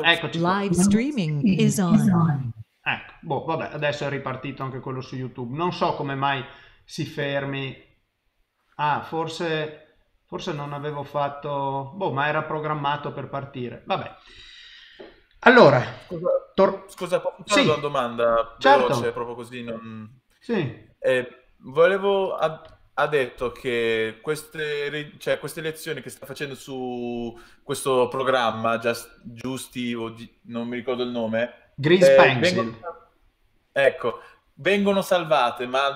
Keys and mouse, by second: 15.8 middle click, 24.1 middle click, 25.8 middle click.